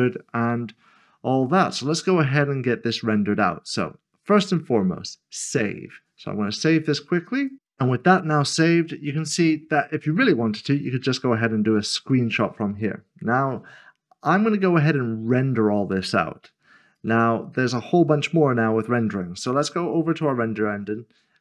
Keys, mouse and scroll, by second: 5.5 click, 17.0 click, 19.8 click.